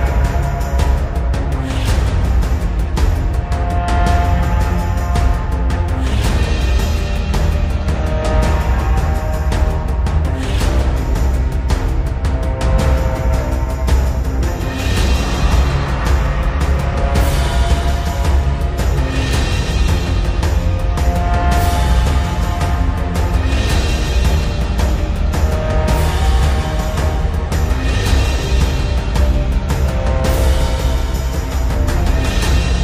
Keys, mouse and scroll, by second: 0.8-4.1 drag, 8.8 click, 12.7 click, 13.1 ctrl+z, 14.2-16.7 drag, 19.9 click, 26.4 click.